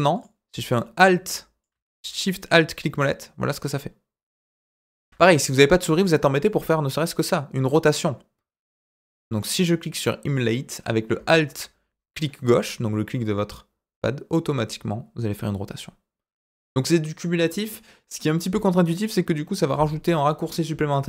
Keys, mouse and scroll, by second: 0.7-1.6 middle drag, 2.1-4.9 shift+middle drag, 6.4-9.3 middle drag, 13.0-17.3 middle drag.